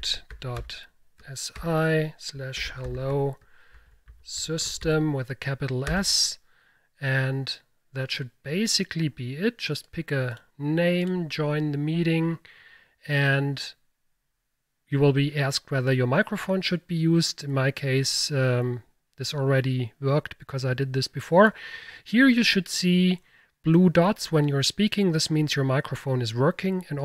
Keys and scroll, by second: 0.0-5.3 typing, 5.9 Return.